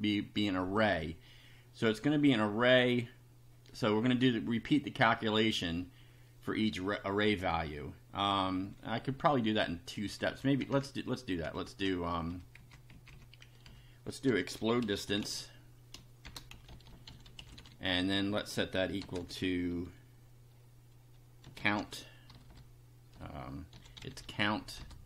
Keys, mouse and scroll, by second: 9.1 Up, 10.2 End, 10.6 Return, 11.6 Return, 12.2 Up, 12.6 Left, 13.6 Down, 14.3-19.1 typing, 21.2-25.0 typing.